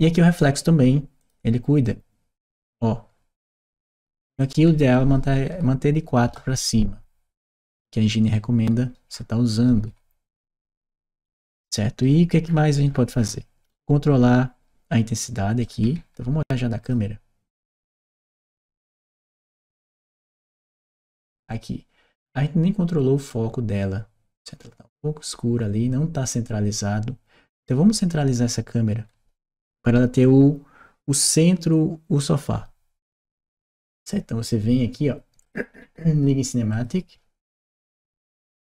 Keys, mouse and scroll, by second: 0.2 click, 1.0 click, 1.7-3.9 drag, 4.2 click, 8.1-15.2 right drag, 12.2-15.2 middle drag, 15.4 right click, 16.6 click, 18.5 right click, 19.8 click, 35.2 click, 36.5 click.